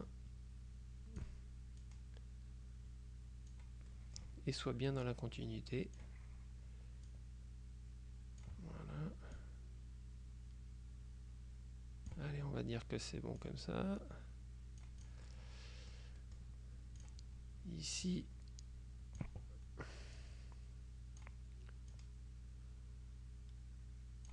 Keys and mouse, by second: 0.1-1.8 drag, 1.9-4.2 drag, 5.2-6.6 drag, 7.2-9.0 drag, 9.5-12.7 drag, 13.5-15.6 drag, 16.3 click, 17.1 click, 18.2-19.8 drag, 20.3-21.8 drag, 22.0-24.3 drag.